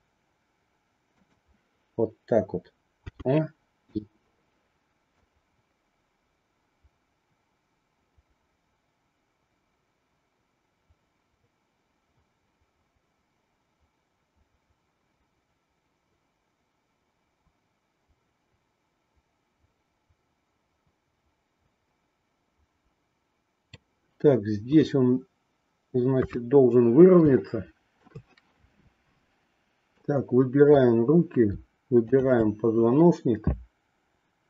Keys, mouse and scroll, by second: 3.8 i, 5.1-23.9 drag, 27.4 shift+middle click, 30.0 click, 32.0-33.4 shift+drag.